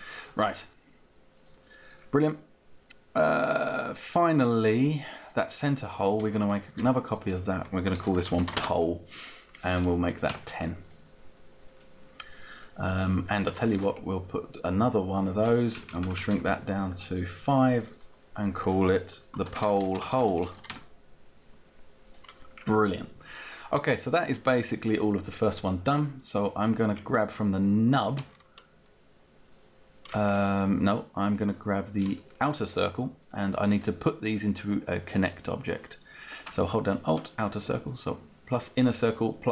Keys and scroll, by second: 7.5-8.9 typing, 10.2 Down, 15.8 Down, 16.5 Down, 18.9-21.0 typing.